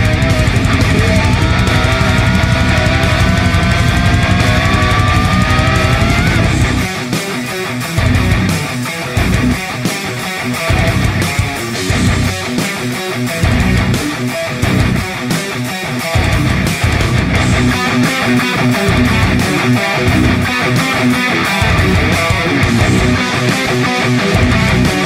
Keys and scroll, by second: 0.7-1.4 typing, 4.9-9.5 typing, 12.4 space, 15.6 space, 16.1 space, 16.2 a, 18.3 v, 18.7 space.